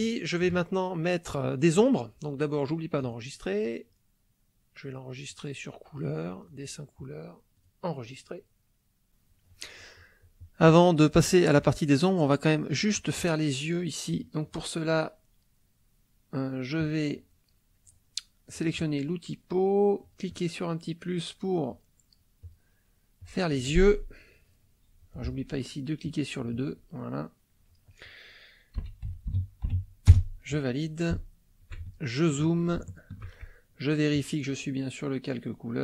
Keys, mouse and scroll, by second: 3.0 click, 5.3 click, 6.5 click, 7.5-8.5 drag, 9.1 click, 14.1 click, 16.8 click, 18.6 click, 20.0 click, 21.7 click, 22.6 click, 23.2 click, 26.1 click, 27.1-28.2 drag, 28.7 o, 29.1 e, 29.3 i, 29.6 l, 30.1 Return, 31.3 shift+middle click, 32.0 ctrl+shift+middle click, 32.9 ctrl+shift+middle click, 34.1 click.